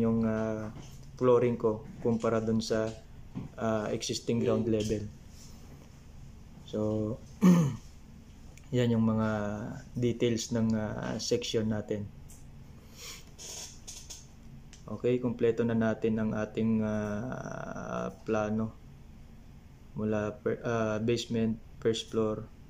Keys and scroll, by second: 1.3 BackSpace, 3.3 ctrl+c, 6.2 BackSpace, 7.4 9.